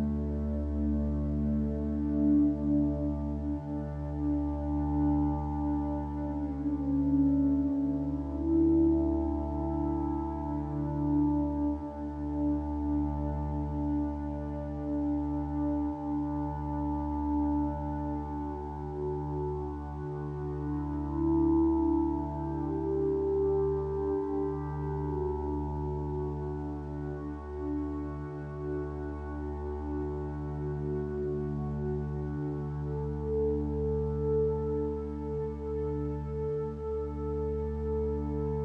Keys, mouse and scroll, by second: 26.5-27.7 drag, 37.5 ctrl+space.